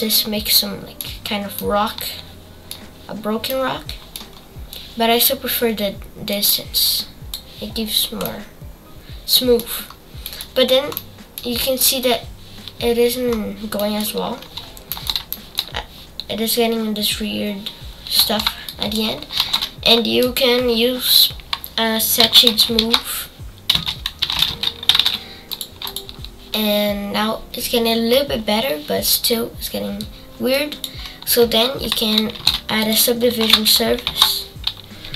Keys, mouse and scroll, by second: 1.2 scroll down 4, 1.5-3.1 middle drag, 3.1-3.5 scroll down 6, 3.5 middle click, 4.3-6.3 scroll up 5, 6.3-7.5 drag, 7.9-8.2 scroll up 4, 8.2-9.9 middle drag, 9.9-10.2 scroll down 3, 10.2 middle click, 10.5-10.9 scroll up 4, 10.9 middle click, 11.5-12.4 scroll up 3, 13.3-13.7 scroll down 4, 13.7 middle click, 14.3-14.9 scroll down 4, 16.0-17.4 scroll up 8, 17.4-18.6 scroll down 4, 18.6-25.5 drag, 27.1-28.1 scroll up 4, 28.1 scroll down 4.